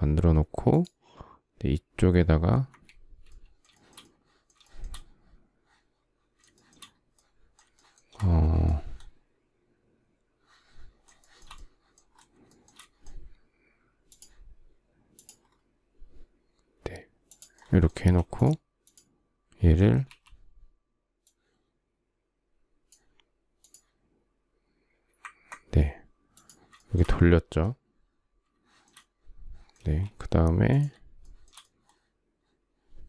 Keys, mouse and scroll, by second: 2.3 Escape, 3.3 shift+middle click, 4.3 shift+middle click, 6.1 shift+middle click, 7.3 shift+middle click, 10.8 shift+middle click, 12.1 shift+middle click, 17.5 space, 26.4 shift+middle click, 29.4 space, 30.8 shift+middle click, 32.9 shift+middle click.